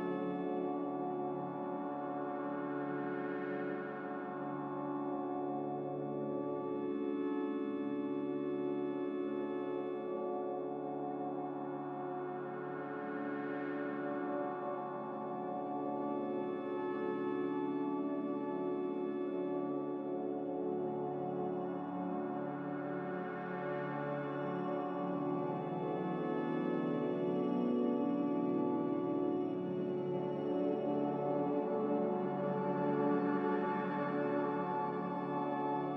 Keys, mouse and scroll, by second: 12.1 click, 12.5 click.